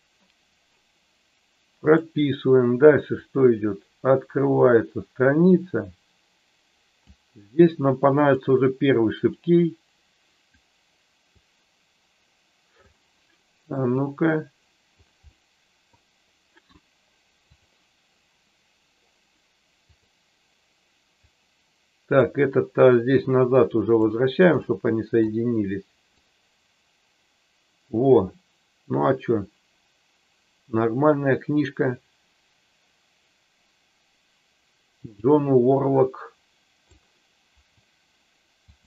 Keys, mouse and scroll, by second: 1.9 click, 3.2-7.1 drag, 9.4-10.5 drag, 11.4-12.9 drag, 14.0 click, 15.2 middle click, 17.5 click, 19.9 click, 21.2-22.2 drag, 23.9 click, 24.6 middle click, 26.1-36.9 drag, 38.7 click.